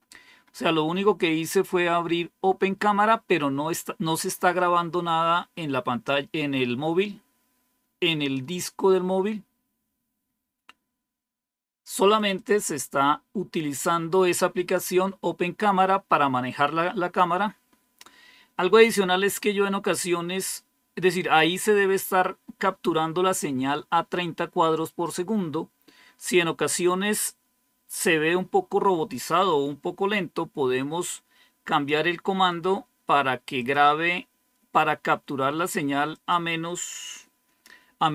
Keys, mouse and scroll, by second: 12.1 click, 12.3 click, 31.6 click, 33.5 click, 36.0 click.